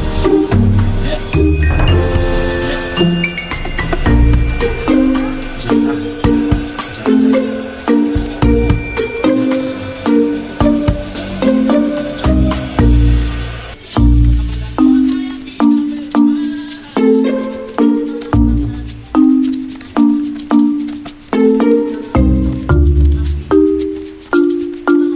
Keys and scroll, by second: 0.7-1.5 typing, 19.1 g, 20.7 g, 24.9 ctrl+c, 25.0 ctrl+f.